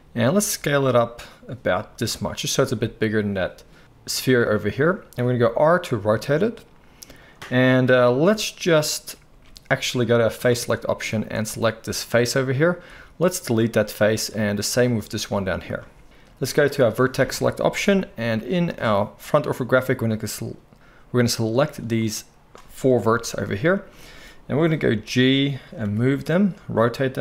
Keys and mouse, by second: 0.3 s, 5.4 r, 8.2 f, 9.3 ctrl+z, 10.4-12.1 drag, 11.1 z, 12.1-14.3 middle drag, 12.9 x, 14.3 click, 14.4-14.8 middle drag, 14.8-25.6 drag, 15.3 x, 17.7 KP_1, 18.2 z, 23.0 KP_1, 24.7 g, 25.6-27.2 middle drag, 25.8 r.